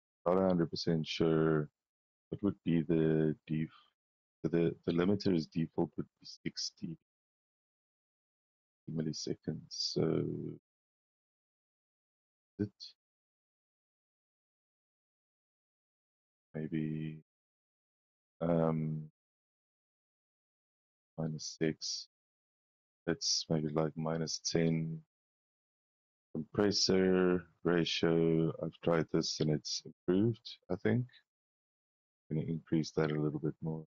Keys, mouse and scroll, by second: 2.5 click, 4.3 click, 4.8 click, 7.6 click, 9.2-11.7 drag, 12.6 click, 13.5 click, 15.7 scroll up 1, 16.3 scroll up 2, 16.9 click, 17.4 scroll up 1, 18.2 click, 19.7 scroll up 2, 20.2 scroll down 2, 20.9 scroll down 2, 21.3-22.2 scroll up 6, 22.3 middle click, 25.3 click, 29.4 click.